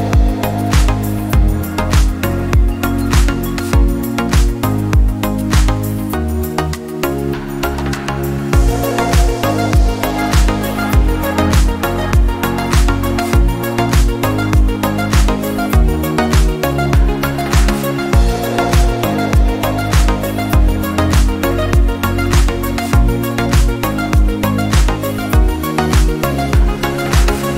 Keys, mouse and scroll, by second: 2.0 click, 2.7-3.5 scroll down 7, 3.5-4.4 scroll up 3, 4.4 shift+middle click, 4.8-5.3 scroll up 5, 6.1-6.9 scroll up 2, 6.9 click, 8.5-9.2 scroll down 2, 9.2 click, 10.6-11.3 scroll down 9, 11.6 shift+middle click, 12.4 scroll up 7, 12.9 shift+middle click, 13.6-14.0 scroll up 1, 14.0 shift+middle click, 14.5-15.9 scroll up 2, 15.9 alt+z, 17.0 ctrl+r, 20.3 ctrl+r, 22.7-23.3 scroll up 2, 26.0 alt+z, 26.6 alt+click.